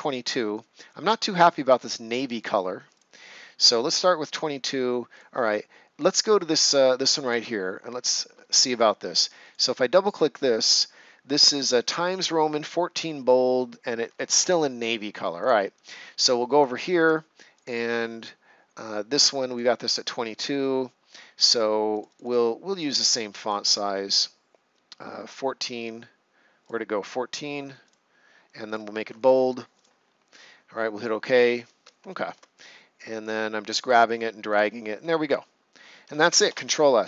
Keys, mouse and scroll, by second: 2.9 click, 8.5 ctrl+scroll up 1, 9.4 click, 14.3 Escape, 16.6 ctrl+scroll down 1, 17.5 click, 21.9 click, 26.6 click, 32.6 click, 35.1-35.8 ctrl+scroll down 1, 36.2 ctrl+scroll up 1, 36.4 ctrl+s.